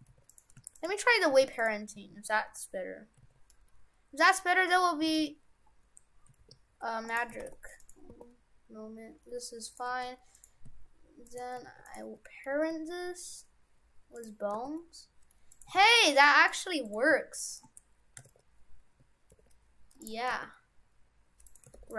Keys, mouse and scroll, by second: 0.1 ctrl+Tab, 0.3 right click, 0.8 shift+right click, 1.4 ctrl+Tab, 1.6 right click, 4.7 middle click, 5.1 ctrl+Tab, 6.4 ctrl+p, 7.4 ctrl+Tab, 7.8 right click, 8.1 r, 9.9 ctrl+Tab, 10.4 right click, 11.2 shift+right click, 11.7 ctrl+Tab, 11.9 right click, 12.6 ctrl+p, 14.6 r, 15.8 ctrl+Tab, 16.0 right click, 16.5 right click, 16.8 right click, 17.5 shift+right click, 17.6 shift+right click, 18.3 ctrl+Tab, 19.4 ctrl+p, 20.3 r, 21.8 ctrl+Tab.